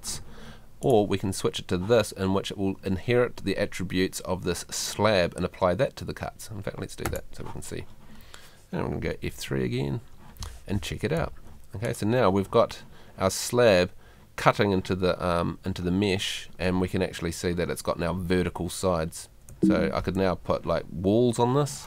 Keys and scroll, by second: 9.3 F3, 11.2 Escape, 19.5 Escape.